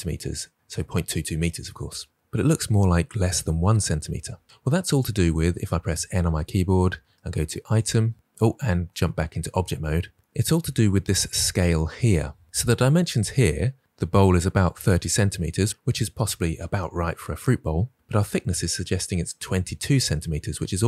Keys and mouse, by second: 5.9 n, 8.7 Tab.